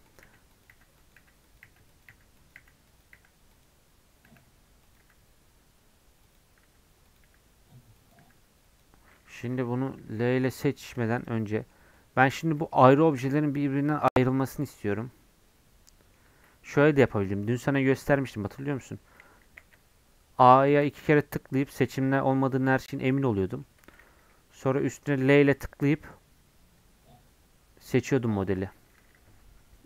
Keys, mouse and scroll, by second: 0.0-3.2 typing, 4.3 l, 5.0 l, 6.7 l, 7.3 l, 8.2 l, 10.2 l, 10.7 scroll down 1, 11.0 Tab, 11.2 click, 11.4 scroll down 1, 11.5 middle click, 11.7 scroll up 3, 11.9 middle click, 12.5 scroll down 2, 12.7-16.3 middle drag, 16.3 Tab, 16.7 3, 17.0-19.2 drag, 19.2 a, 19.4 a, 20.9 a, 22.3 middle click, 22.9 3, 23.2-25.3 middle drag, 25.3 l.